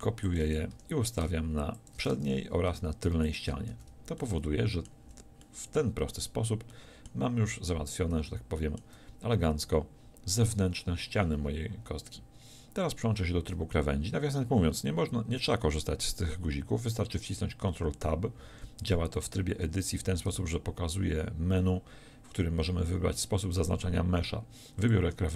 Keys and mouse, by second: 0.4 click, 0.8 r, 2.6 shift+d, 3.8 a, 5.1 z, 14.6-19.7 middle drag, 19.7 ctrl+Tab, 23.2-25.3 middle drag.